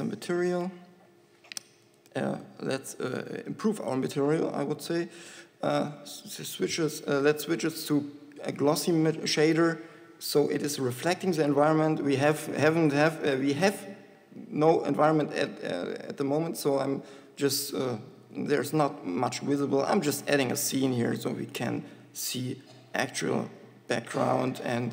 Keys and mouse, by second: 20.5 KP_7, 23.2 shift+a.